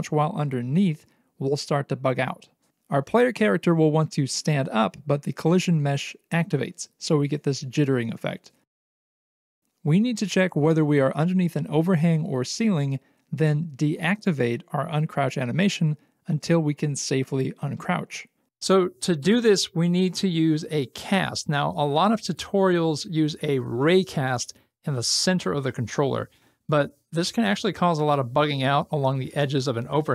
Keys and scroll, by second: 10.3 c, 12.2 Escape.